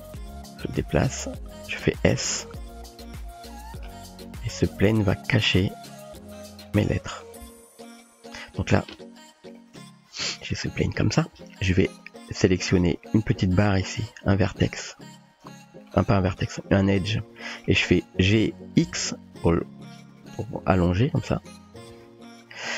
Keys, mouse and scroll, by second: 0.4-0.8 typing, 2.7 s, 4.4 g, 6.2 s, 7.0 g, 7.6 s, 11.4 Tab, 13.3 click, 13.9 click, 14.2 typing, 15.3 click, 15.9 click, 17.5 shift+click, 18.4 g, 21.9 Tab, 22.2 typing.